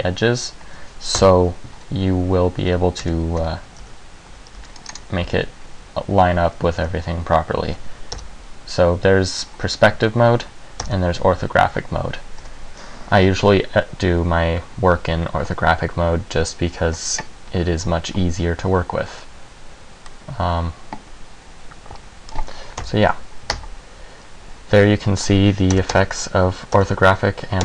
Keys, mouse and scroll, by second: 1.3 KP_1, 3.2-5.3 typing, 3.6 Tab, 5.1 click, 7.1 z, 7.9 z, 8.3 KP_5, 11.0 KP_5, 12.6 a, 20.3 middle click, 22.9 KP_1, 23.7 Tab, 24.9 Tab, 25.9 KP_5, 26.1 KP_5, 26.9 KP_5.